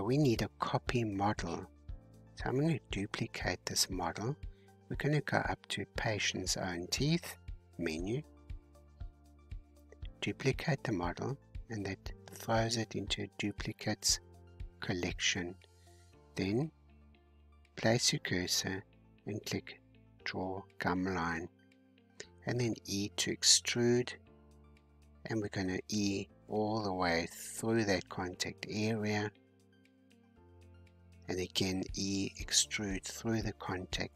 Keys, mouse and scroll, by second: 0.5-1.9 drag, 1.9-3.8 scroll up 47, 5.0-7.9 scroll down 18, 7.9-8.9 scroll down 2, 8.9-9.5 scroll down 2, 11.5-14.5 drag, 15.1-17.7 shift+right drag, 17.7-20.5 drag, 20.5 g, 22.9 e, 23.7 e, 25.2-27.1 middle drag, 27.1 e, 27.7 e, 29.1 shift+middle click, 30.0 e, 30.7 e, 31.9 middle click, 32.7 e.